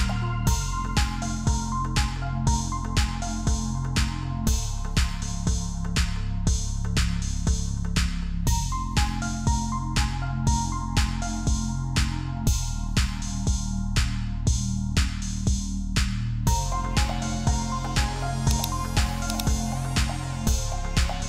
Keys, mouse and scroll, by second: 2.1-4.5 typing, 5.5 Return, 6.5-7.6 typing, 7.8-9.2 scroll up 1, 9.2 double click, 12.6 typing.